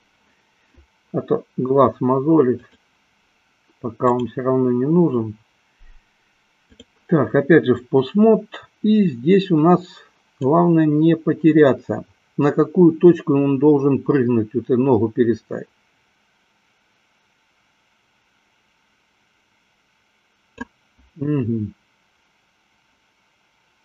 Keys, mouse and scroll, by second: 2.7 click, 4.1-7.1 drag, 10.7-20.9 drag.